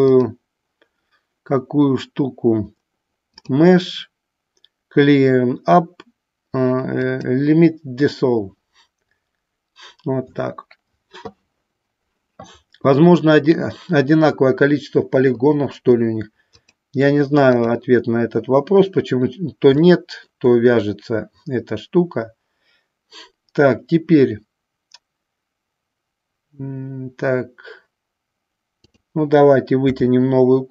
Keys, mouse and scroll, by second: 3.6-7.4 drag, 16.8-18.0 drag, 19.9 shift+middle click, 28.9 click.